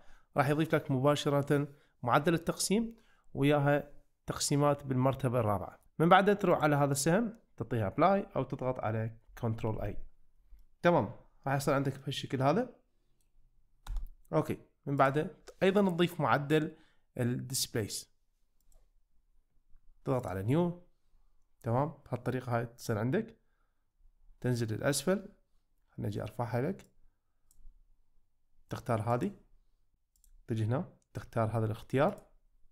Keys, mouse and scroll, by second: 6.7-8.1 drag, 9.8 ctrl+a, 10.7 shift+middle click, 11.6 Tab, 12.0-13.2 middle drag, 15.2-18.7 drag, 20.2 click, 27.0 click, 29.2 click, 29.9 ctrl+z, 30.2-32.2 drag.